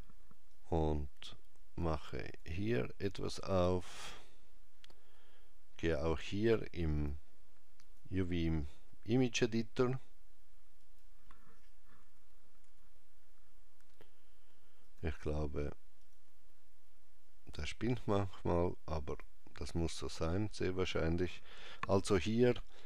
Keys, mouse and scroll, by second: 0.4 click, 6.8 click, 10.7 click, 11.9 Escape, 14.7 click, 17.3 click.